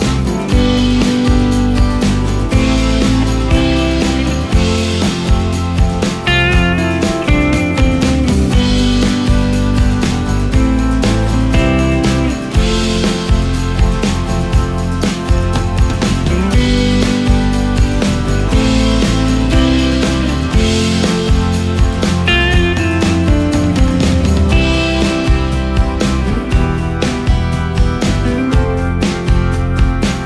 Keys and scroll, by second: 3.0 ctrl+space, 3.7 ctrl+space, 6.1 ctrl+space, 7.3 ctrl+space, 16.5 ctrl+space, 17.4 ctrl+space, 18.3 ctrl+space, 19.5 ctrl+space, 22.0 F3, 22.2 F2, 25.6 ctrl+space, 29.4 ctrl+shift+space, 30.0 ctrl+shift+space.